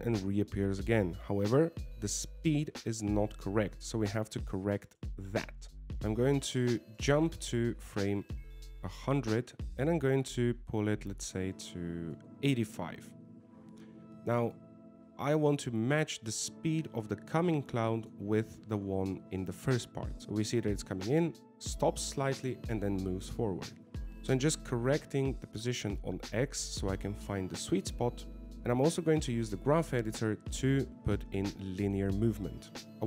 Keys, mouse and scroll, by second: 4.3 alt+a, 5.6 alt+a, 5.9 click, 5.9 middle click, 7.4 shift+middle click, 7.7 middle click, 8.8 right click, 11.1 right click, 15.0 shift+middle click, 16.4 click, 20.2 alt+a, 20.8 click, 21.5 alt+a, 23.6 alt+a, 25.5 ctrl+z, 26.5 g, 30.0 click, 31.4 click, 32.9 middle click, 32.9 scroll down 5.